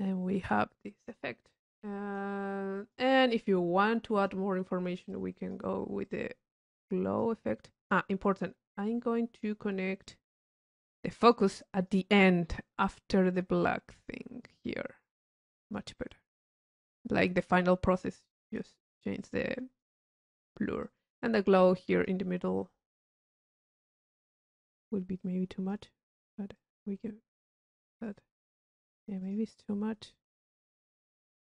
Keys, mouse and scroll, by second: 1.1 click, 4.4 click, 5.3-5.9 drag, 6.2 click, 7.0-7.4 drag, 7.9 click, 10.2-12.0 drag, 13.0-13.5 drag, 14.1 click, 15.2-17.5 drag, 18.4 click, 19.4 click, 20.4 click, 21.0 click, 21.8-22.2 drag, 23.0-23.7 drag, 24.5-25.3 drag, 25.4-26.1 drag, 26.7-28.0 drag, 28.9 click, 30.6-31.4 drag.